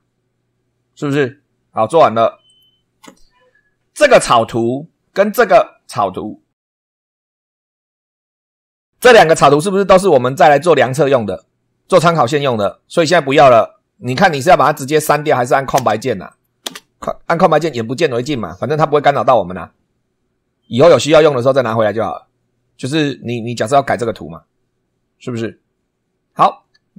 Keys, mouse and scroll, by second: 2.4 click, 4.3 click, 5.3 click, 13.2 click, 15.2 click, 15.7 space, 16.2 click, 16.6 space.